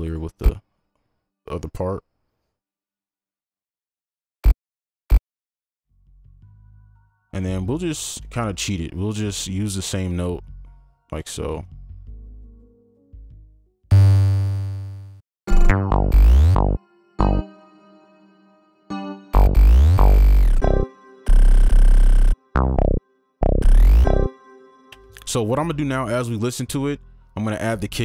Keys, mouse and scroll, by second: 1.5 alt+click, 4.7 double click, 6.3 alt+click, 8.0 ctrl+click, 8.4 shift+double click, 10.4 shift+click, 11.6 alt+click, 15.4 space, 16.2 ctrl+click, 16.5 ctrl+click, 16.7 ctrl+Down, 17.0 right click, 21.3 right click, 24.9 space.